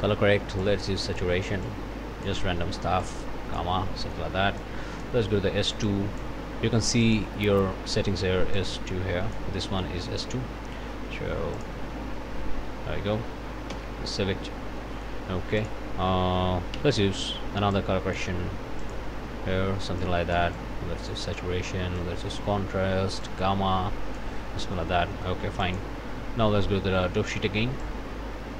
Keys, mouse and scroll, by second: 0.0 click, 0.6 click, 1.6 click, 3.0 click, 4.0 click, 4.6 click, 5.9 click, 7.0 click, 8.6-9.6 drag, 11.6 click, 13.7 ctrl+s, 14.8 click, 15.6 click, 16.7 c, 17.7 click, 18.8 click, 20.0-21.3 drag, 22.0 click, 23.2-24.4 drag, 24.7 click, 25.6 click, 27.8 click, 28.1 click, 28.2 click.